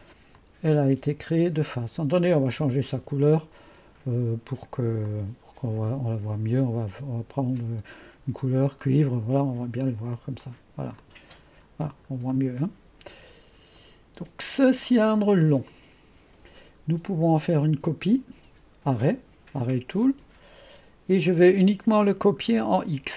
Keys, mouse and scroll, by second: 0.4-1.3 drag, 3.0 ctrl+d, 5.1-6.3 drag, 9.1-12.4 drag, 12.4-15.7 right drag, 15.7-18.4 drag, 20.1 click.